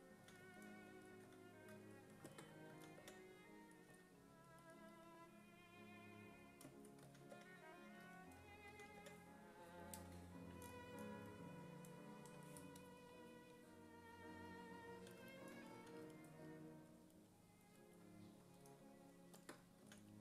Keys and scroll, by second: 0.2 s, 1.3 s, 2.7 s, 3.0 5, 3.9 s, 7.1 s, 7.4 5, 8.7 s, 9.0 5, 15.8 s, 19.6-20.2 typing.